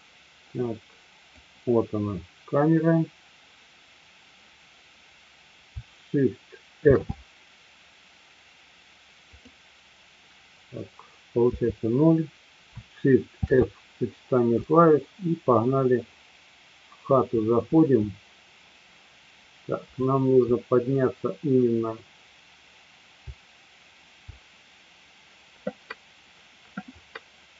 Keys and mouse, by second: 1.3 click, 6.8 shift+f, 11.4 KP_0, 13.4 shift+f, 15.1-17.2 Up, 17.7 Up, 19.9 Up, 23.2 Up, 23.7-24.2 Up.